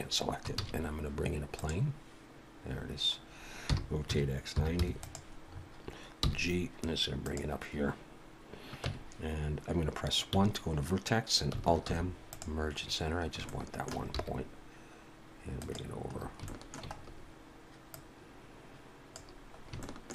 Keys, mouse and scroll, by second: 0.6 shift+a, 2.7-3.2 scroll down 3, 3.7 r, 5.5-6.2 scroll up 4, 6.2 g, 8.9 Tab, 10.3 1, 12.0 alt+m, 12.8-13.2 scroll up 5, 13.5 shift+middle click, 14.2 g, 16.1-17.2 scroll up 6, 16.5 shift+middle click, 17.9 click, 19.6 scroll up 2, 19.8 shift+middle click.